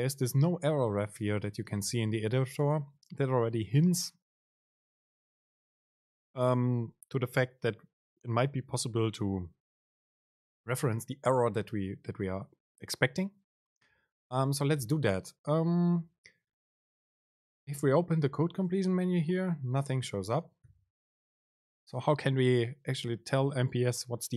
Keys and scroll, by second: 14.9 BackSpace, 16.1 Escape, 16.7 Left, 17.4 Right, 18.7 super+space.